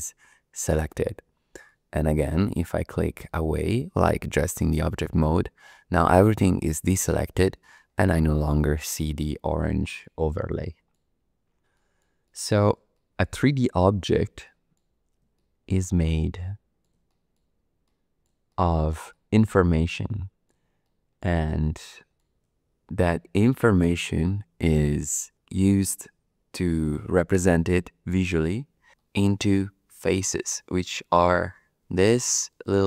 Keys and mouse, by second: 3.2 click, 7.6-10.0 middle drag, 10.6 shift+middle click, 11.7 shift+middle click, 12.2 middle click, 12.9 shift+middle click, 14.4 shift+middle click, 15.3 shift+middle click, 16.0 middle click, 17.1 shift+middle click, 17.8 middle click, 18.0 click, 18.5 shift+click, 19.1 click, 20.0 middle click, 20.1 click, 20.8 shift+click, 21.4 click, 21.5 middle click, 23.3 shift+click, 23.8 shift+middle click, 29.0 shift+middle click, 29.5 middle click, 30.3 shift+middle click, 30.7 middle click, 31.8 3, 32.5 click.